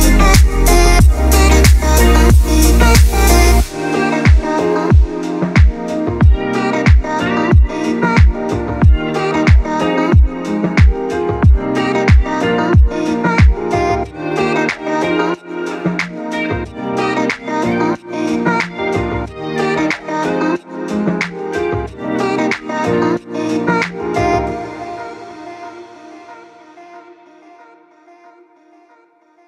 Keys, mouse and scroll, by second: 0.1 click, 1.0 space, 1.1 click, 1.3 space, 1.5-3.3 drag, 3.3 space, 11.5 click, 14.8 space, 14.8 click, 15.1 space, 15.5 click, 17.5 click, 19.4 space, 19.5 click, 19.6 space, 20.8 space, 21.4 click, 22.1 space, 22.2 click, 22.4 space.